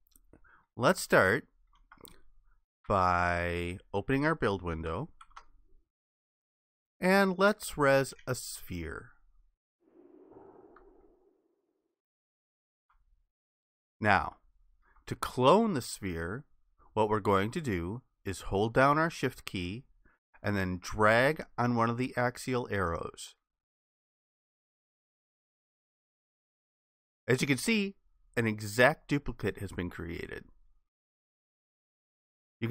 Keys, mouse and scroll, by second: 1.2 alt+click, 2.9 Escape, 5.3 ctrl+b, 11.2 alt+click, 14.3 alt+click, 23.6 shift+click.